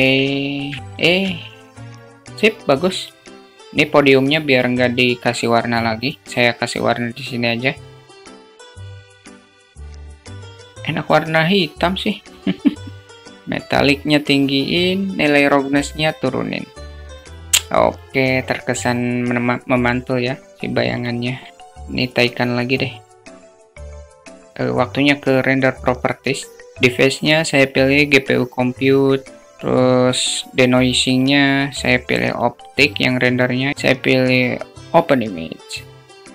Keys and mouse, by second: 0.7-1.8 alt+shift+middle drag, 1.8 q, 2.3 click, 5.6 click, 6.7 click, 7.6 click, 13.1 click, 13.7 click, 14.7-16.6 drag, 17.2 click, 19.9 click, 21.2 click, 21.8 click, 22.5 middle click, 22.6 click, 22.7 middle click, 23.2 click, 23.6 click, 24.3-27.7 drag, 30.5-31.7 drag, 32.6 click, 33.3-34.4 drag.